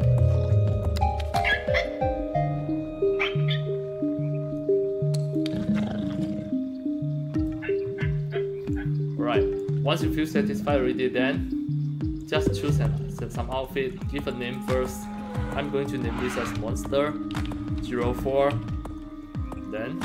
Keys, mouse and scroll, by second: 0.6 click, 4.5-7.4 alt+drag, 8.2 scroll up 1, 8.7 alt+click, 12.1 click, 13.9 click, 16.0-18.5 typing.